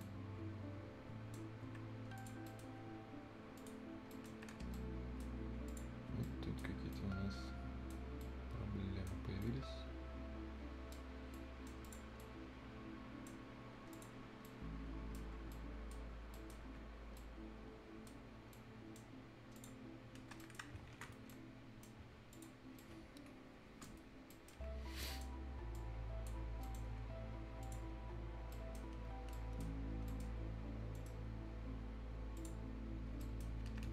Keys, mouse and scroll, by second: 0.0-1.5 right drag, 1.5 scroll up 1, 1.8 Escape, 1.8-2.2 scroll down 1, 2.2 click, 2.5 right click, 3.6 click, 4.1 right click, 4.3 Escape, 4.4 scroll up 1, 4.5 Escape, 4.7 right click, 5.4-5.7 scroll up 1, 5.7 click, 6.1 scroll down 1, 6.3 right click, 6.7 scroll down 1, 6.9-9.3 right drag, 9.3 scroll up 1, 9.4-11.1 right drag, 11.1 scroll up 1, 11.3 right click, 11.8 click, 12.2 right click, 13.4-13.8 scroll up 1, 13.9 click, 14.3 scroll down 1, 14.4 middle click, 14.8 right click, 15.2 scroll down 1, 15.5 right click, 16.0 scroll down 1, 16.3 right click, 16.7 Escape, 16.9 scroll down 1, 17.2 right click, 18.3 scroll up 1, 18.5 right click, 19.1 scroll up 1, 19.6 click, 19.9-20.2 scroll down 1, 20.2 Escape, 20.4 right click, 21.3 ctrl+right click, 21.9-22.2 ctrl+scroll up 1, 22.3 ctrl+click, 22.7 ctrl+scroll down 1, 22.8 ctrl+right click, 23.9 ctrl+Delete, 24.1-24.8 ctrl+scroll down 2, 24.3 ctrl+right click, 25.0 ctrl+scroll up 1, 25.0 ctrl+right click, 25.7 ctrl+right click, 26.1 ctrl+click, 26.5 ctrl+scroll up 1, 26.6 right click, 27.6 ctrl+click, 27.9 ctrl+scroll up 1, 28.5 ctrl+right click, 29.1 ctrl+scroll down 1, 29.3 ctrl+right click, 29.7-30.1 ctrl+scroll down 1, 30.1 right click, 30.3 ctrl+scroll down 1, 31.0 ctrl+middle click, 32.4 ctrl+click, 33.1 ctrl+scroll down 1, 33.2 right click, 33.5 ctrl+Escape.